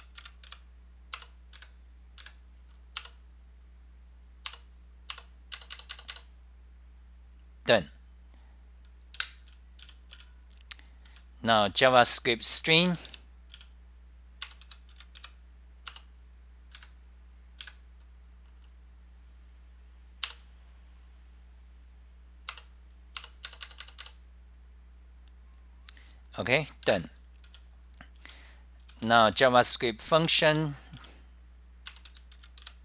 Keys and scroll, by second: 0.1 F10, 0.3 Home, 0.5 k, 1.3 Return, 1.6 Up, 2.3 Up, 2.8-3.5 typing, 4.6 Return, 5.2 Return, 5.2 k, 9.0-9.9 typing, 11.0-14.2 typing, 14.9 Home, 15.3 k, 16.1 Return, 16.9 Up, 17.6 Up, 17.9-18.6 typing, 20.1-20.8 typing, 22.5 Return, 22.6-23.4 typing, 25.7-26.4 typing, 27.0 super+w, 27.6 w, 29.0 t, 32.0-32.8 typing.